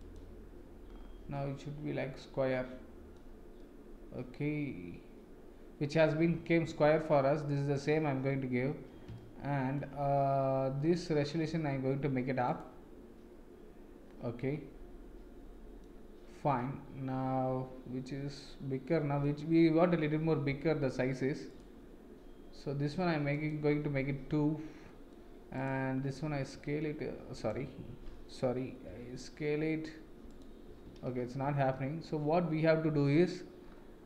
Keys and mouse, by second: 1.3-3.1 middle drag, 3.6-6.4 middle drag, 7.0 middle click, 9.2 shift+middle click, 14.4-15.8 middle drag, 16.6-19.2 middle drag, 23.3 click, 24.8 middle click, 26.3 w, 27.3-28.5 right drag, 28.8 s, 31.0 ctrl+z.